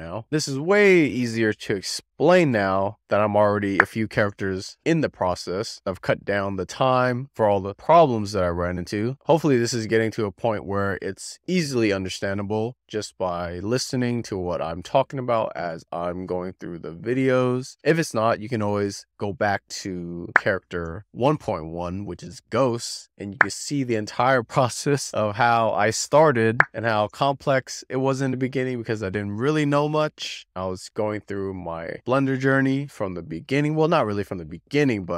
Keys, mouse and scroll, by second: 0.4-0.7 scroll up 3, 0.7-1.4 middle drag, 2.6-3.7 shift+middle drag, 6.2-7.3 shift+middle drag, 7.7-8.0 scroll up 3, 8.0-8.7 middle drag, 9.8-11.0 shift+middle drag, 11.3-11.6 scroll up 3, 11.6-12.3 middle drag, 13.4-14.6 shift+middle drag, 15.0-15.3 scroll up 3, 15.3-15.9 middle drag, 17.1-18.2 shift+middle drag, 18.6-18.9 scroll up 3, 18.9-19.6 middle drag, 20.7 shift+middle click, 20.9 middle click, 21.9 alt+middle click, 22.0 alt+middle click, 22.2-22.5 scroll up 4, 22.5 middle click, 23.1 middle click, 26.1 scroll up 4, 26.2 middle click, 28.0-29.2 shift+middle drag, 29.5-29.8 scroll up 4, 29.8-30.6 middle drag, 31.6-32.7 shift+middle drag, 33.1-33.5 scroll up 4, 33.5-34.1 middle drag.